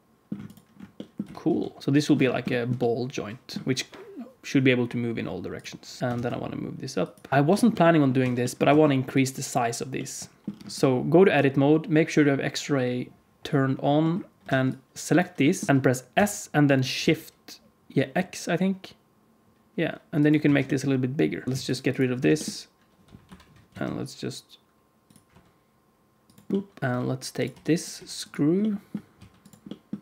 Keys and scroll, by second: 1.1 g, 6.0 shift+KP_1, 6.1 shift+d, 7.3 g, 8.1 Tab, 8.6 alt+z, 14.4 alt+a, 15.7 s, 16.1 s, 20.4 alt+z, 21.4 alt+a, 21.4 KP_1, 21.4 x, 22.2 shift+d, 25.2 r, 26.8-27.9 typing, 29.1 s, 29.9 g.